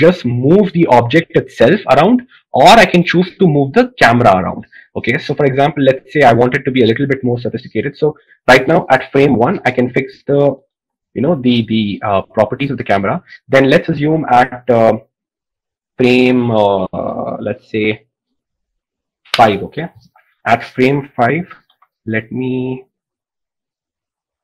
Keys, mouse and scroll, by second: 11.4 i, 22.4 g.